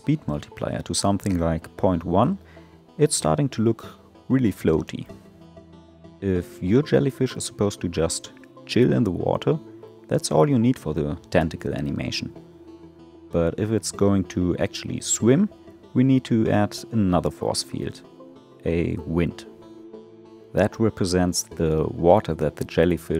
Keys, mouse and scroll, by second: 1.8 space, 10.6 space, 12.5-15.8 drag, 15.8 shift+a, 19.2 g.